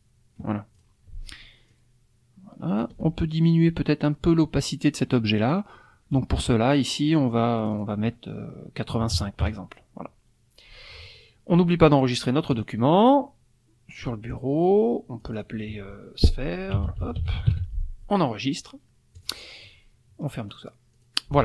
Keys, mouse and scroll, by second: 0.7 click, 1.7 ctrl+shift+click, 7.6 click, 8.9 KP_8, 9.1 KP_5, 9.4 KP_Enter, 12.5 click, 14.0 click, 15.2 click, 16.5-18.0 typing, 19.2 click, 20.5 click, 20.9 click.